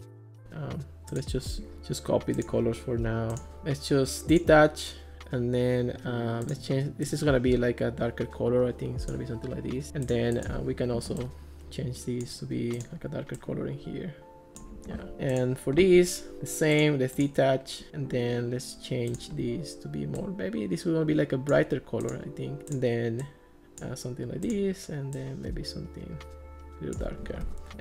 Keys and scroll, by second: 15.1 Escape, 27.5 Escape.